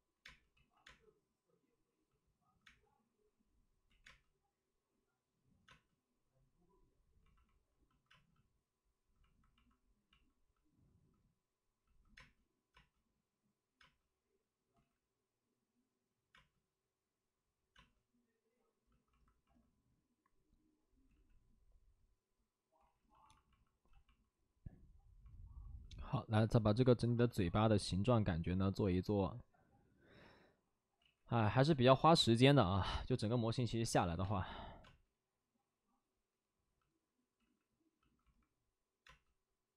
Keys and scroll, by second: 0.0-0.7 typing, 0.5 ctrl+z, 3.8 ctrl+z, 3.9 space, 8.3 space, 12.1 space, 12.6 space, 13.7 space, 14.7 ctrl+z, 16.2 space, 17.7 space, 20.4 space, 21.0 ctrl+z, 23.4 ctrl+z, 27.2 space, 28.6 space, 28.8 space, 30.9 ctrl+z, 33.0 alt+s, 33.9 alt+s, 34.1 space, 34.7 space, 36.8 space, 37.3 ctrl+z, 39.0 space.